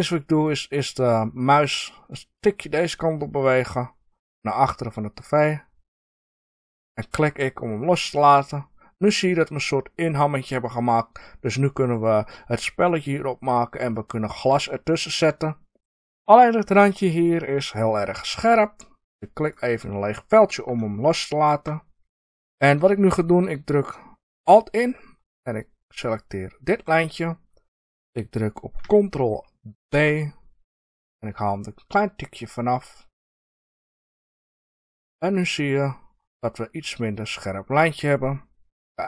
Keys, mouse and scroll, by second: 6.8 click, 7.3 middle click, 14.7-15.2 middle drag, 15.5-17.7 middle drag, 17.7 click, 19.3 click, 20.2-21.0 scroll up 2, 21.0-25.9 shift+middle drag, 25.9 alt+click, 29.8 ctrl+b, 34.8 click, 35.1-39.0 middle drag.